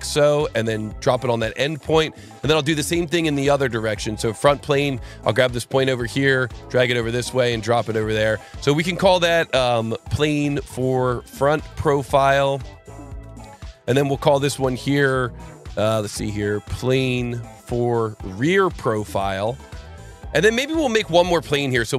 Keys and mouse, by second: 0.4 click, 1.4 right click, 2.2 click, 3.8 ctrl+click, 4.7 ctrl+click, 6.8 click, 7.1 right click, 7.9 click, 8.7 click, 8.8 F2, 9.5-13.5 typing, 14.5 click, 16.1 F2, 16.5-19.7 typing, 20.5 click, 21.7 click.